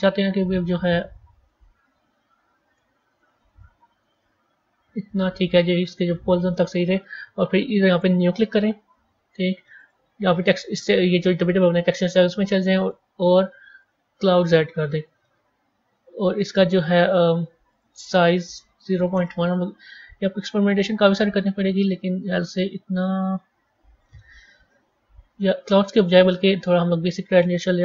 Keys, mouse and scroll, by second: 1.2 KP_1, 3.8 g, 6.4-8.1 middle drag, 8.1-9.8 drag, 12.7-15.4 drag, 15.4 scroll down 3, 17.6-23.5 drag, 24.6-25.8 scroll up 7, 25.9-27.8 drag.